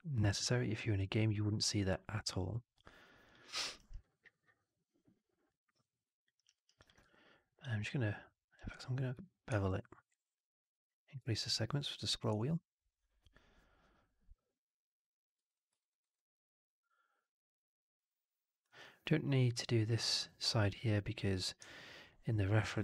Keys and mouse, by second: 1.0-1.8 alt+middle drag, 2.0-3.2 alt+drag, 3.3 alt+middle drag, 3.5 alt+right drag, 3.7 alt+right click, 3.9-6.2 alt+drag, 6.3 alt+right drag, 6.4 alt+right drag, 6.9 q, 15.7 alt+right drag, 15.9 alt+right drag, 16.0-18.5 alt+drag.